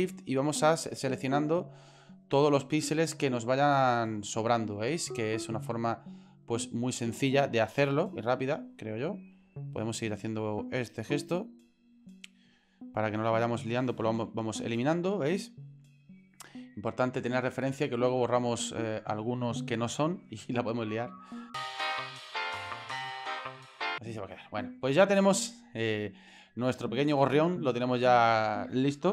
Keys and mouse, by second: 1.2-1.7 shift+drag, 2.6-3.5 shift+drag, 4.1-5.2 shift+drag, 5.5-6.3 shift+drag, 6.5-6.9 shift+drag, 7.5-8.2 shift+drag, 8.6-9.1 shift+drag, 9.5-10.7 shift+drag, 11.1-11.8 shift+drag, 12.5-13.2 shift+drag, 14.4 Delete, 17.3 shift+middle click, 21.5 shift+click, 21.5 ctrl+z, 21.5 shift+click, 21.6 ctrl+z, 21.6 shift+click, 21.7 shift+click, 21.8 shift+Delete, 21.8 shift+middle click, 21.9 shift+click, 22.1 shift+click, 22.2 shift+Delete, 22.2 shift+click, 22.3 shift+middle click, 22.3 shift+click, 22.5 shift+Delete, 22.7 shift+right click, 22.8 shift+middle click, 22.9 shift+middle click, 23.2 shift+click, 23.3 shift+click, 23.5 shift+click, 23.5 shift+click, 23.7 Delete, 25.4-25.8 shift+middle drag, 26.4-27.2 middle drag, 27.5-28.2 middle drag.